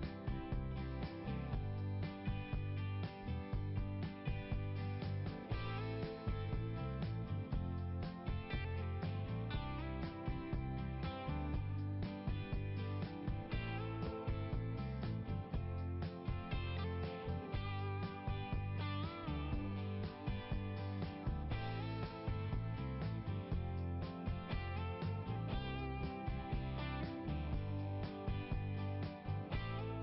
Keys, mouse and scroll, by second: 0.1 click, 0.2 click, 1.6 click, 5.2 click, 5.4 click, 7.2 click, 8.0 click, 9.1 click, 11.4 click, 13.5-13.9 scroll up 2, 14.4 scroll up 1, 15.5 scroll up 1, 17.5 click, 17.6 click, 17.8 click, 17.9 click, 18.0 click, 18.1 click, 20.4 click, 20.7 click, 21.7 click, 23.5 click, 24.4 click, 25.3 click, 25.4 click, 26.3 click.